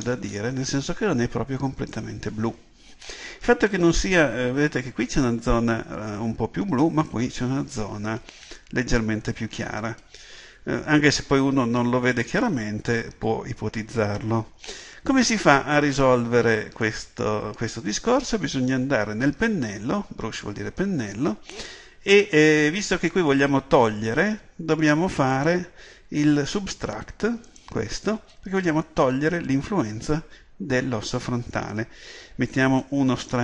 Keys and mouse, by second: 0.1-16.9 middle drag, 16.9-29.0 drag, 32.9-33.4 drag.